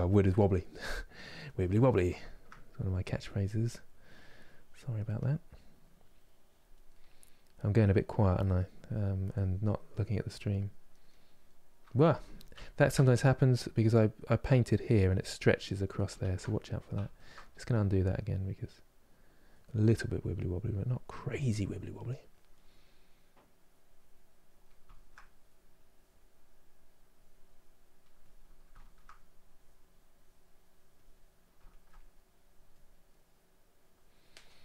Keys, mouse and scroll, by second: 0.2-1.3 drag, 1.3-2.9 middle drag, 2.9-6.6 drag, 6.6 middle click, 7.1-8.2 drag, 8.2 middle click, 8.7-10.7 drag, 10.7 middle click, 11.3 click, 11.9 ctrl+z, 12.2 ctrl+z, 12.7-14.4 middle drag, 14.4 click, 15.1 middle click, 15.9 ctrl+z, 16.1 middle click, 16.7 ctrl+z, 17.0 middle click, 17.6-19.3 drag, 19.3 middle click, 19.8-22.3 drag, 22.3 middle click, 23.2-24.6 drag, 24.6-25.6 shift+middle drag, 25.6-28.4 drag, 28.4 shift+middle click, 29.1-31.3 drag, 31.3 ctrl+middle click, 32.1 click, 32.7-34.4 middle drag, 34.4-34.6 drag.